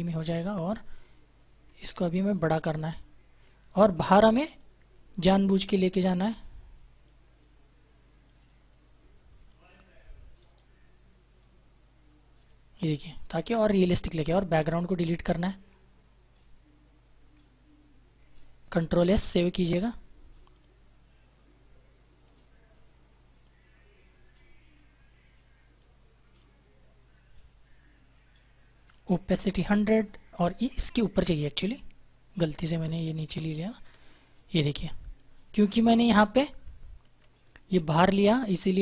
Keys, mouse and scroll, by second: 2.5 click, 13.3 Return, 14.6 click, 18.8 ctrl+s, 20.4 click, 25.7 click, 30.5 click, 35.1 click, 36.9 ctrl+=, 37.4 space, 37.9 click, 38.0 space, 38.2 space.